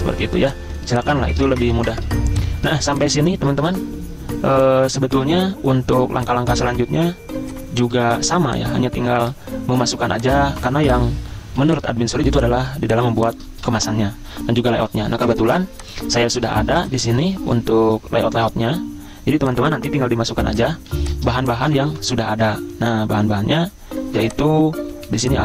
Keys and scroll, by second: 0.9 z, 8.2 ctrl+z, 9.1 ctrl+g, 11.6 z, 13.2 v, 18.4 ctrl+c, 20.9 z, 21.9 ctrl+v, 24.2 v, 25.1 z.